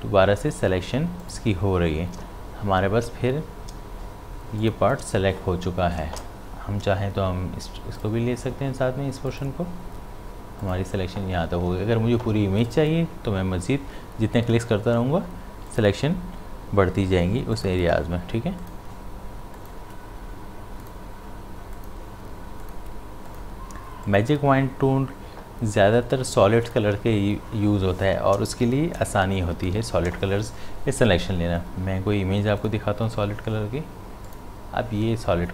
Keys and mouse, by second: 1.2 shift+click, 4.6 shift+click, 8.0 shift+click, 12.6 shift+click, 15.6 shift+click, 26.7 shift+click, 29.6 ctrl+d, 29.9 v, 32.6-35.5 drag.